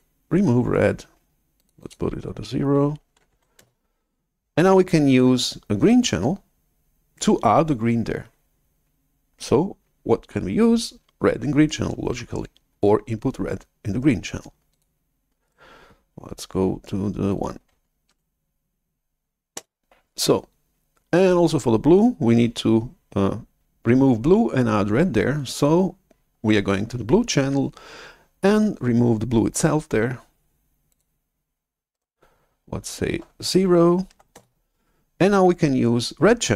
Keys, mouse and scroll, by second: 3.2 0, 3.5 Return, 14.7-16.3 drag, 15.4 right click, 18.1 1, 19.5 Return, 31.0 click, 31.8 right click, 34.0 0, 34.3 Return.